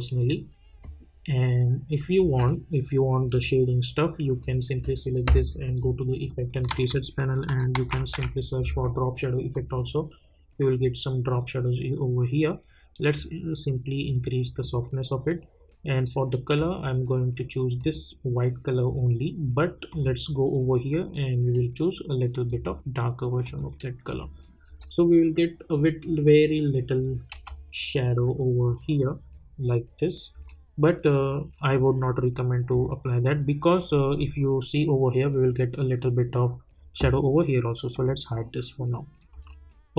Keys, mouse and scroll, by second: 2.2 space, 3.3 click, 5.6 click, 6.7 ctrl+a, 7.2-8.6 typing, 9.5 click, 13.1-16.3 drag, 16.5-23.4 drag, 24.1 space, 25.2-26.8 scroll up 1, 26.8-27.3 scroll down 1, 27.3 space, 30.3 space, 31.4-32.7 scroll down 1, 32.7 click, 34.0-34.5 scroll up 1, 37.9 click, 38.4-39.3 scroll down 1, 39.3 space.